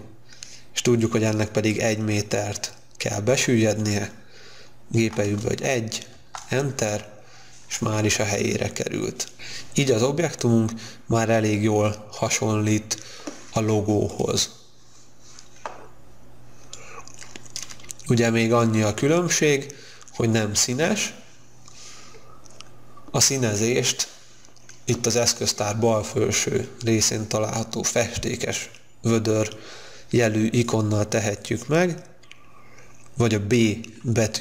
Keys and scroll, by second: 5.1 1, 6.2 Return.